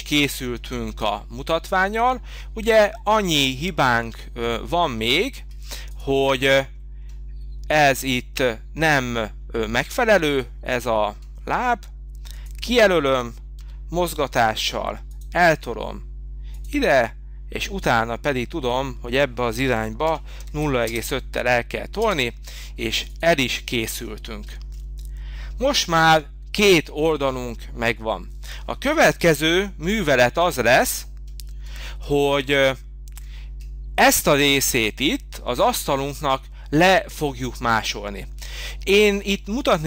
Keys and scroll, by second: 13.6 m, 19.3-20.8 typing, 21.9 space, 29.2 h.